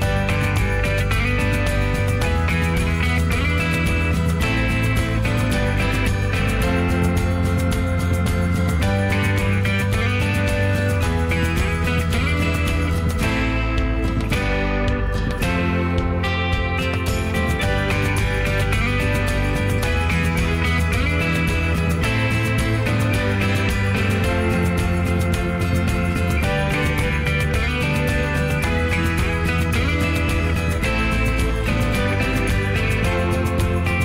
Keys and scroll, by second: 8.0 Escape, 8.2 Escape, 8.3 Escape, 12.2 Escape, 15.7 Escape, 17.0 Escape, 20.0 Escape, 33.6 Escape.